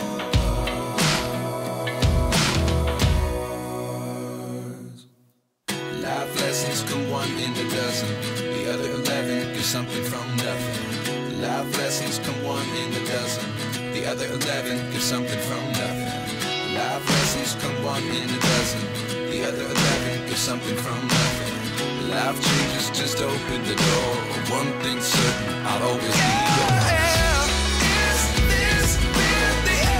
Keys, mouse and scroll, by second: 0.0 middle click, 0.6-3.0 drag, 3.8 click, 5.2 click, 5.8 click, 7.2 click, 7.8 drag, 9.0 click, 9.3 middle click, 10.5-12.9 drag, 13.4 click, 15.9 click, 17.8 click, 18.1 g, 18.3 middle click, 18.8 click, 20.4 click, 21.1-23.3 drag, 25.1 click, 26.7 click, 27.6 click, 28.4-29.9 drag.